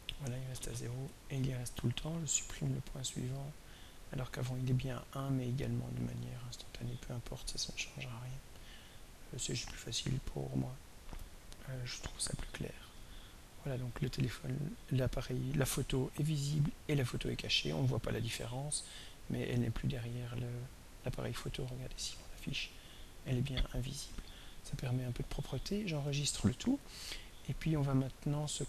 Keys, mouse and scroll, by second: 1.1 right click, 2.3 drag, 3.3 click, 5.1 right click, 8.2 click, 10.3-11.7 drag, 12.6-19.5 drag, 20.6 click, 21.7 click, 22.9 click, 25.8 ctrl+click, 26.1 ctrl+s, 28.1 click.